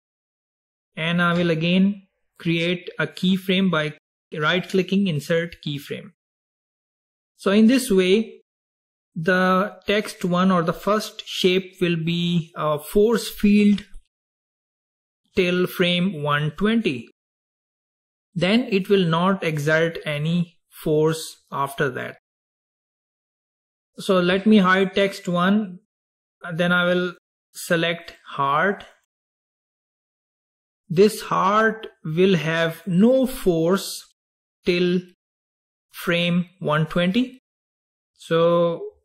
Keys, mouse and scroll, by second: 2.6 right click, 8.1-11.2 drag, 25.0 click, 27.3 click, 28.1 click, 29.1 click, 32.9 click.